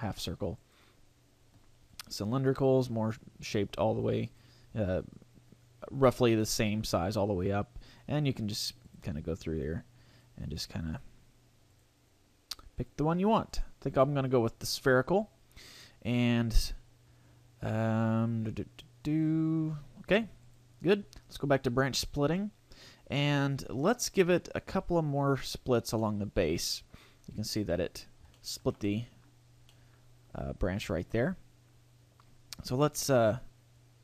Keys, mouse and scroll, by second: 0.6 click, 4.2 click, 7.0 click, 10.1 click, 10.6 click, 10.8 click, 12.8 click, 19.2-19.7 scroll down 1, 19.7-20.2 scroll up 3, 20.4 click, 24.6 click, 26.0 middle click, 27.2-27.7 scroll up 2, 28.4 shift+middle click, 28.8 middle click, 29.6 middle click, 33.8 click.